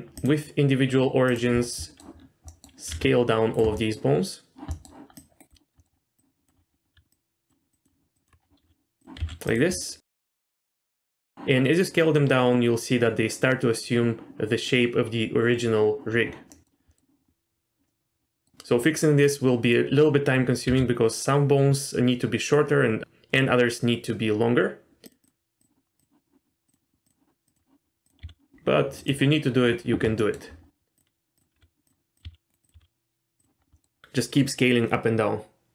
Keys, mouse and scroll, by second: 0.2-1.3 drag, 1.5-1.9 scroll down 2, 1.8 middle click, 2.5 middle click, 2.9 s, 3.7 middle click, 4.7 middle click, 5.1 click, 5.8 middle click, 5.9-6.2 scroll down 1, 6.2 click, 6.6-6.9 scroll up 3, 7.1 ctrl+click, 7.7 ctrl+click, 8.1 ctrl+click, 8.4 scroll down 2, 8.6 s, 9.2 s, 9.8 middle click, 10.2 z, 10.3 middle click, 10.4 s, 10.9 middle click, 16.5 middle click, 16.7 scroll up 1, 16.9 middle click, 17.9 middle click, 20.7 s, 25.2 click, 25.6 click, 26.0 click, 26.6 click, 27.0 click, 27.4 click, 28.2 s, 30.2 middle click, 30.5-30.9 scroll up 2, 31.3 click, 31.5 s, 32.1 click, 32.2 s, 32.6 click, 32.7 s, 33.6 scroll down 2, 33.7 middle click, 33.9 scroll up 2.